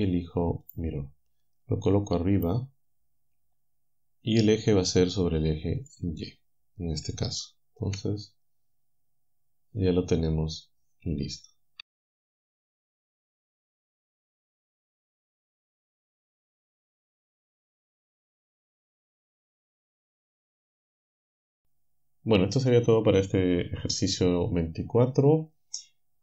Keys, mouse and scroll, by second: 0.7 click, 2.4 click, 5.8 click, 7.9 KP_7, 10.5-11.0 scroll down 2, 13.3 click, 13.9-14.5 scroll down 2, 14.5-14.9 scroll down 1, 14.9 click, 15.6-16.1 scroll down 2, 16.1 shift+right click, 17.1 a, 18.9 click, 19.8 click.